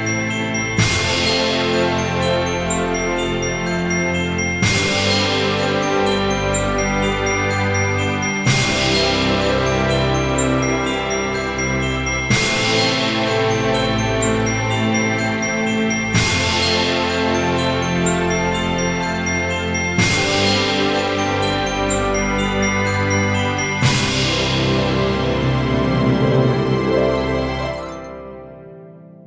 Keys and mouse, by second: 0.5 g, 0.6 z, 2.6-5.8 typing, 3.3 click, 5.3 click, 7.2 click, 8.0 shift+d, 9.1 click, 9.4-13.6 typing, 10.8 click, 11.4 click, 12.1 click, 12.7 click, 13.2 click, 13.9 click, 14.0 middle click, 15.0 g, 15.1 z, 16.6 click, 18.4 shift+middle click, 19.2 middle click, 20.0 shift+middle click, 22.0 click, 22.5 shift+click, 23.8 shift+d, 24.2 x, 25.4 y, 25.8 click, 26.9 shift+click, 27.8 s, 28.1 z.